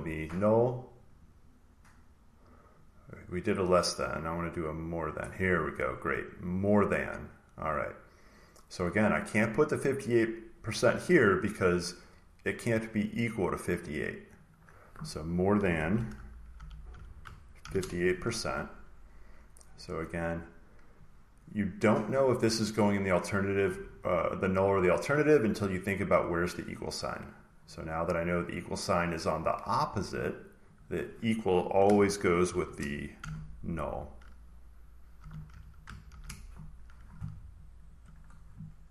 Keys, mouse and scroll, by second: 1.1 click, 3.9 click, 4.6-6.0 drag, 7.4-9.5 drag, 11.5 click, 13.7 click, 14.4 click, 15.7-19.4 typing, 22.0 click, 23.0 click, 24.3 click, 24.7 click, 27.2 click, 29.1 click, 30.7 click, 33.1-34.5 drag, 33.1 typing, 34.3-38.4 typing, 37.8-38.9 drag.